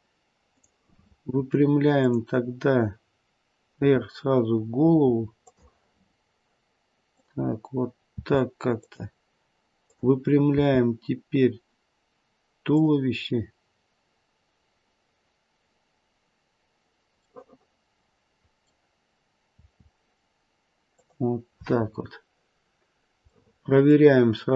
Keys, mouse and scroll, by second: 0.6 click, 1.9 click, 3.8 r, 6.1-6.6 scroll down 2, 7.0 click, 8.1 r, 9.7 click, 10.5 r, 17.3 middle click, 19.5 r, 21.8-22.5 scroll up 2, 23.3 middle click.